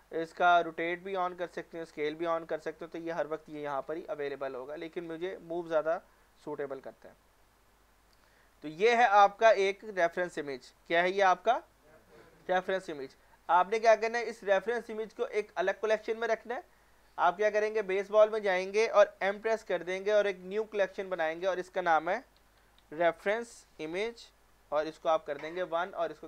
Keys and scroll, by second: 19.3 m, 22.4-22.8 typing, 23.8-24.9 typing, 24.9 Return.